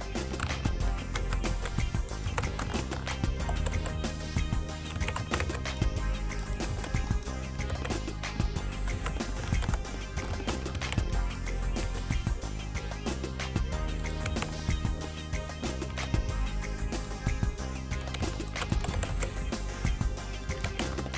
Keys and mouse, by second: 1.3 z, 1.6 c, 2.3 click, 2.5 z, 3.0 alt+r, 3.5 r, 5.1 a, 5.3 z, 5.6 c, 6.8 c, 7.8 c, 9.0 z, 9.7 alt+r, 10.9 a, 11.6 right click, 12.0 r, 14.5 a, 16.1 r, 18.9 r, 20.4 r, 20.8 a.